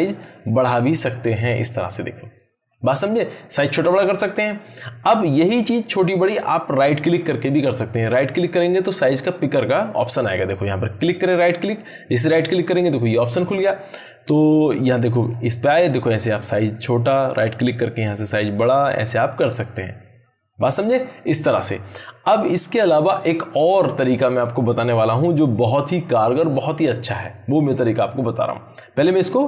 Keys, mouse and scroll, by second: 10.9 right click, 13.9-15.5 drag, 17.3 right click.